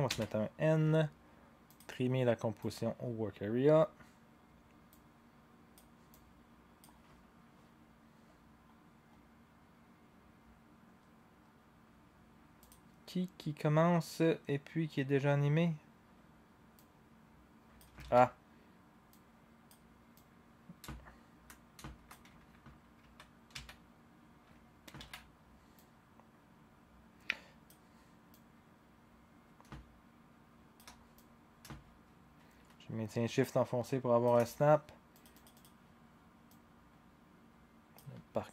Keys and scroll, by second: 0.1 n, 18.0 ctrl+z, 23.0 ctrl+z, 23.5 ctrl+z, 25.1 ctrl+a.